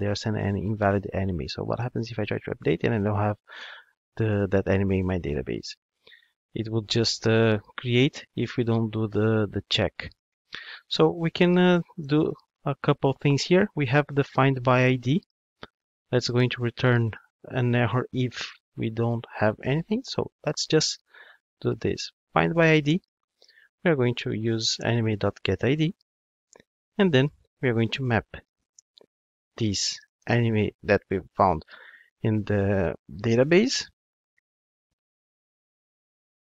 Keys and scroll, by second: 22.9 Return.